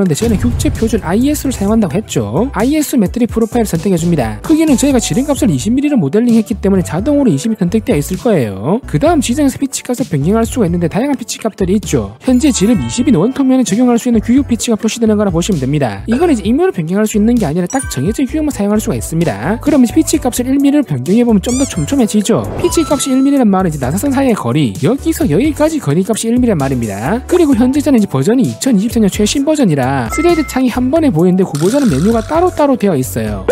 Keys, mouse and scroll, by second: 2.8 click, 5.1 click, 6.2 click, 7.8 click, 19.9 click.